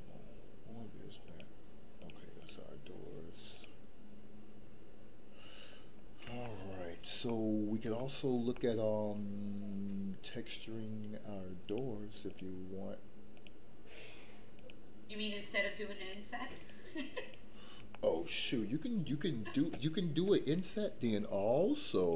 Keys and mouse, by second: 1.2 click, 2.0 click, 2.4 click, 6.4 shift+middle click, 7.2 middle click, 8.0 shift+middle click, 8.5 middle click, 11.6 click, 12.2 click, 13.3 click, 14.5 click, 15.2 click, 16.0 click, 16.6 click, 17.2 click, 17.9 shift+middle click.